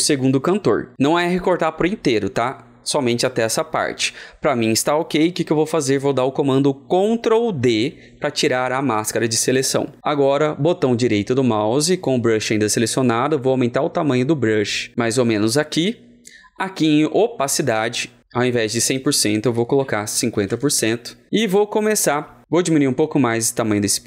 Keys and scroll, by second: 7.6 ctrl+d, 19.4 ctrl+d, 19.6 ctrl+a, 20.2 KP_5, 20.7 KP_6.